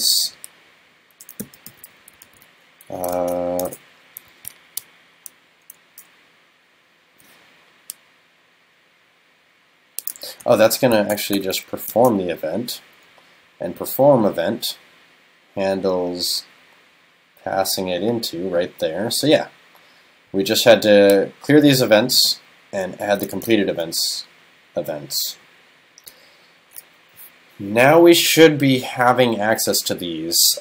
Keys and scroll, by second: 3.3 shift+super+Left, 10.6 shift+super+Left, 12.0 super+s.